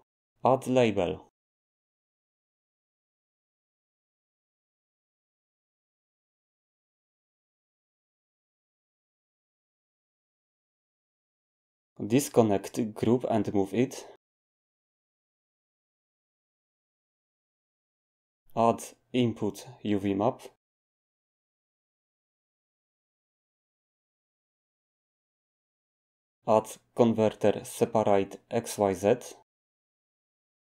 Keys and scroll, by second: 1.4-4.0 typing, 18.9 a, 26.7 a.